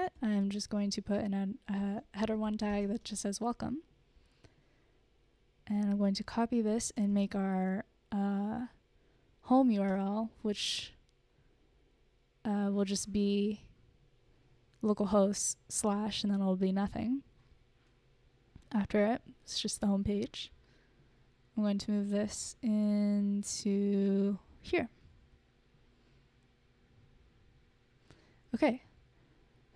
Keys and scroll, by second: 0.4-4.1 typing, 6.6 super+c, 6.8 super+c, 7.6 Return, 7.8 super+v, 10.5 BackSpace, 11.0 super+s, 22.9 super+x, 25.2 super+v, 25.9 super+s.